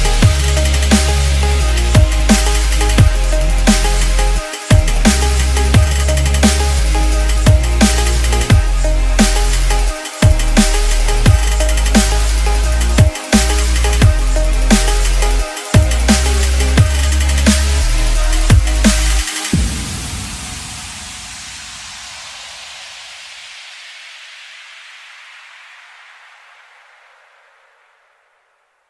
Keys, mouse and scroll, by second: 0.3 click, 3.9 right click, 4.1 F11, 4.5 right click, 5.5 click, 6.5-9.1 typing, 9.9-11.0 drag, 11.6 right click, 12.6 click, 13.5 F10, 13.8 right click, 15.3 click, 21.2 2, 21.3 Return, 22.6-26.7 drag.